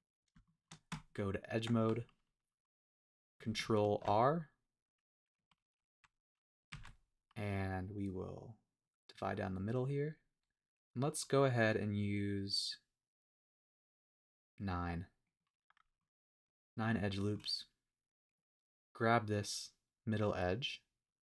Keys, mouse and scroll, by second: 0.4-0.8 shift+middle drag, 0.9 Tab, 3.1 click, 3.6 super+t, 5.5 super+t, 6.7 super+r, 15.2 right click, 16.0 middle click, 16.5 scroll down 2, 16.8 middle click, 18.3 click.